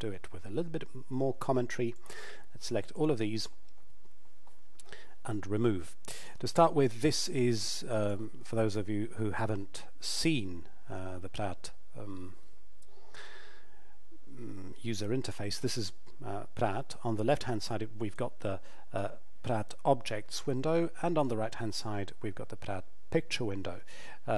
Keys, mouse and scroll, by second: 1.9 click, 2.9 shift+click, 6.1 click, 17.3 click.